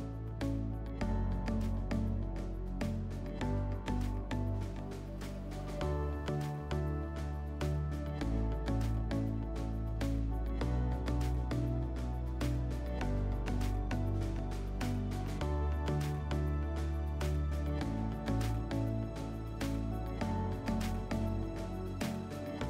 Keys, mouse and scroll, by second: 7.6-8.9 drag, 10.8 click, 18.0 click.